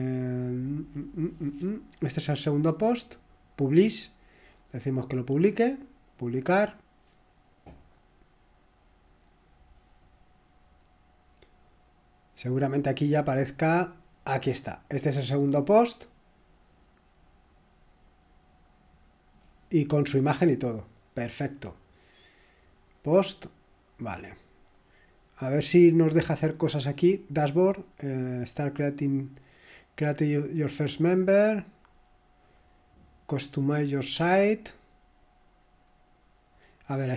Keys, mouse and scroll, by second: 3.7 click, 5.1 click, 6.2 click, 6.5 click, 13.1 click, 14.8 click, 18.5 click, 19.0-19.4 scroll down 1, 19.4-20.3 scroll up 1, 21.4 click, 22.1 click, 22.9 click, 36.1-36.5 scroll down 2.